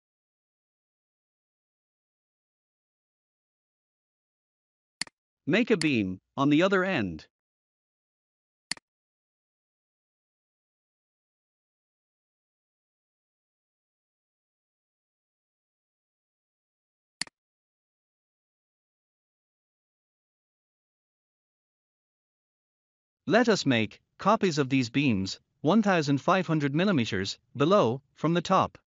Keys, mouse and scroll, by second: 2.4 scroll up 1, 4.9 click, 6.5 scroll up 1, 8.6 click, 10.1 scroll down 1, 13.9 scroll up 1, 17.1 click, 18.3 scroll down 1, 21.9 scroll up 1, 23.4 scroll down 1, 23.9 scroll up 1.